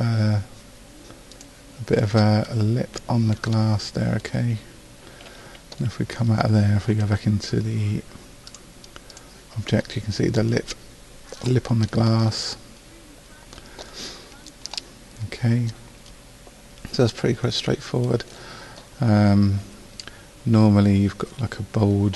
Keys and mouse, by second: 5.3 a, 15.8 middle click.